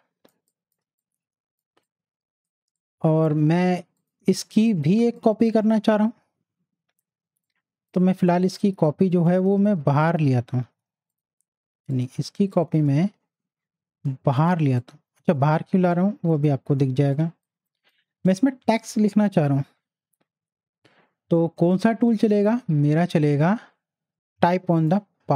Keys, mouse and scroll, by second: 0.3 space, 0.5 click, 1.6 space, 1.8 click, 2.1 space, 2.8 click, 6.3 space, 7.4 click, 7.8 space, 8.8-10.7 drag, 10.7 ctrl+z, 11.1-14.6 ctrl+drag, 14.6 shift+space, 14.8 click, 15.2 space, 15.9 click, 17.2 space, 17.4 click, 17.7 space, 19.5 t, 21.6 t, 21.6 right click, 24.7 right click, 24.8 click.